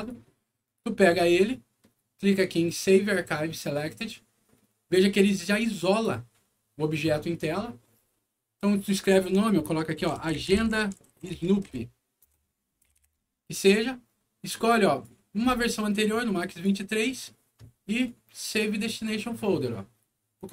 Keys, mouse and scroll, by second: 0.6 alt+click, 1.2 scroll up 2, 1.4 middle click, 3.9 click, 5.3 click, 8.8 click, 9.7-13.0 typing, 14.7 click, 16.1 click, 18.0 click, 20.3 click.